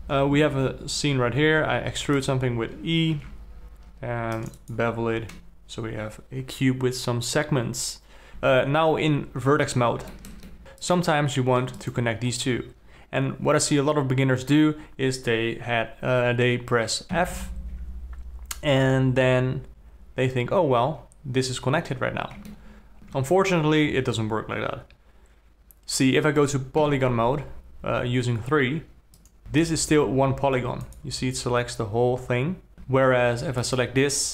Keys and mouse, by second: 0.0 n, 1.9 e, 3.5 ctrl+r, 8.3 1, 8.6 alt+a, 8.9 1, 10.5 alt+click, 12.2 shift+click, 17.5 f, 21.5-22.8 middle drag, 23.5 alt+a, 27.2 3, 29.4 g, 29.8 alt+a, 30.7 g, 32.7 alt+a, 33.1 alt+a, 34.0 click.